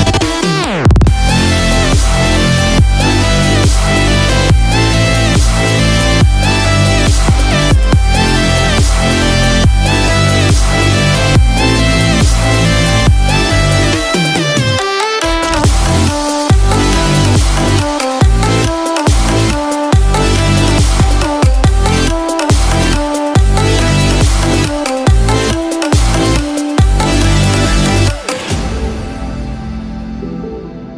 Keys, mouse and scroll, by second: 0.7-1.0 scroll up 3, 1.5 shift+middle click, 5.1-6.4 scroll down 6, 6.4-6.9 scroll up 2, 7.2-8.6 scroll up 2, 8.6 click, 17.0 scroll down 1, 17.5 scroll up 1, 19.7 click, 19.7 scroll up 1, 26.9 Delete, 30.1-30.5 scroll down 3, 30.8-30.9 scroll up 3.